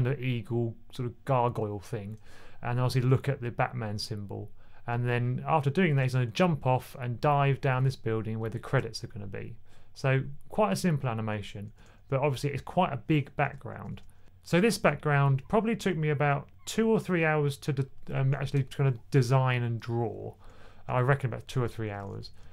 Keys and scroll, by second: 11.2-11.5 typing, 13.6 typing, 22.0 typing.